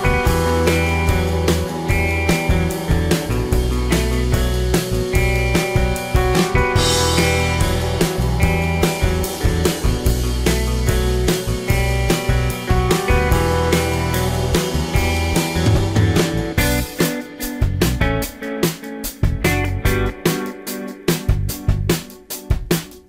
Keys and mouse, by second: 0.2-0.8 drag, 1.7 shift+a, 4.7 F6, 9.6 KP_1, 10.2-10.7 drag, 11.9 F6, 12.5 drag, 14.8 r, 17.4-19.0 middle drag, 18.3 s, 19.3 middle click.